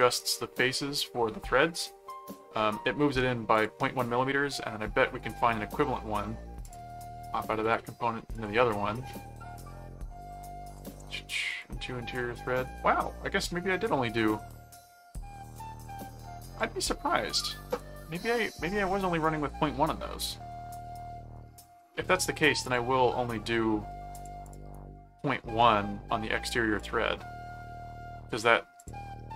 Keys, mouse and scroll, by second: 3.5 click, 6.6 click, 7.6 click, 8.3 click, 11.5 click, 15.4 click, 16.4 click, 19.6-20.9 middle drag, 21.5 click, 22.6 click, 24.1 click, 25.6 middle click, 26.7 click, 28.8 click.